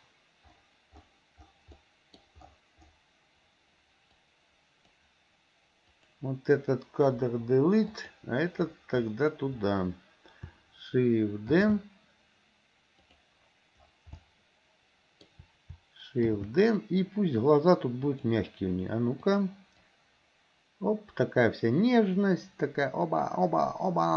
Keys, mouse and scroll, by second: 1.8 middle click, 4.3 click, 5.9 click, 7.3 Delete, 7.9 click, 11.6 shift+d, 14.3-15.3 middle drag, 16.4 shift+d, 19.3 click, 19.9-24.1 drag.